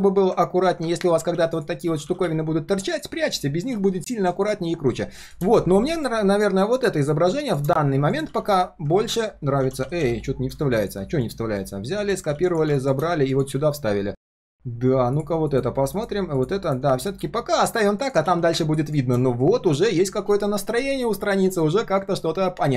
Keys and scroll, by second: 1.0 ctrl+z, 1.2 ctrl+z, 1.3 ctrl+z, 1.8 ctrl+z, 3.7 ctrl+shift+z, 3.9 ctrl+shift+z, 8.2 ctrl+v, 9.0 ctrl+v, 9.6 ctrl+z, 9.8 ctrl+z, 10.0 ctrl+z, 12.3 ctrl+c, 13.4 ctrl+v, 18.2 ctrl+s.